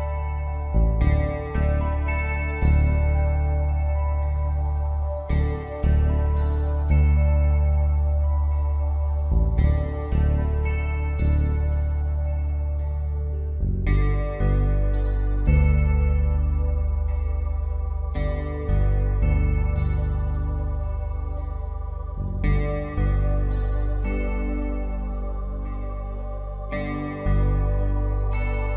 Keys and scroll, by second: 6.9 ctrl+Return, 18.1 ctrl+d, 20.8 i, 23.9 alt+shift+Delete, 25.0 v.